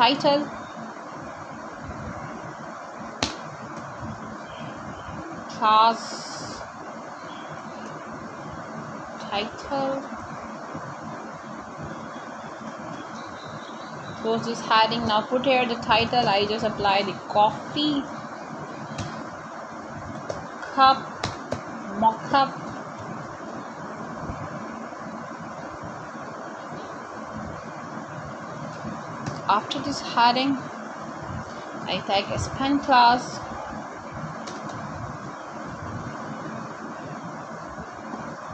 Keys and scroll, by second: 0.5-3.4 typing, 4.5-8.7 typing, 16.2-17.4 typing, 18.1 Return, 18.9-19.9 typing, 20.0 Return, 21.6-23.7 typing, 24.3 Right, 25.6 shift+., 29.2 w, 29.6 e, 30.1 b, 30.3 space, 31.5-33.0 typing, 35.0-38.5 typing.